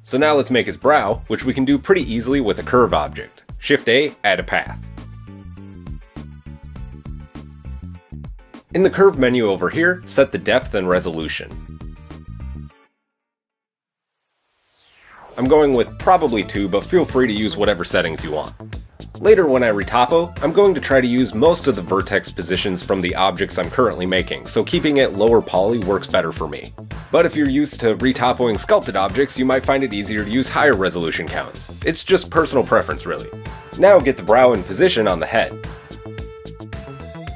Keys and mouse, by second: 0.1-4.3 shift+middle drag, 2.9 shift+a, 4.7 shift+a, 8.9 click, 10.8-35.8 shift+drag, 20.7 KP_1, 34.7 g, 35.8-37.3 shift+middle drag.